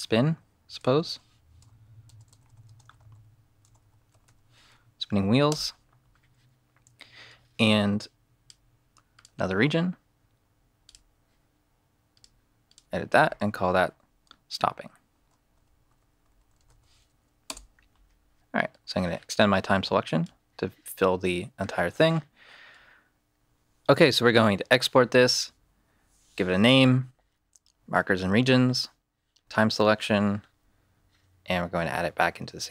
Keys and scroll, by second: 0.3-4.7 typing, 5.5 Return, 14.9-17.1 typing, 17.4 Return.